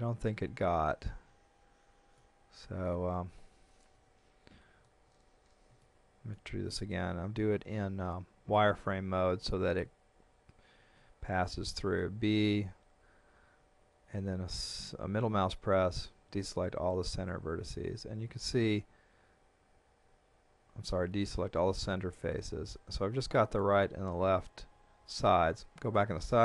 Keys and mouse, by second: 0.3 z, 2.2 middle click, 3.9 KP_1, 5.8 shift+middle click, 7.3 b, 8.5 click, 10.9 b, 12.0 middle click, 16.9 middle click, 25.0 KP_3.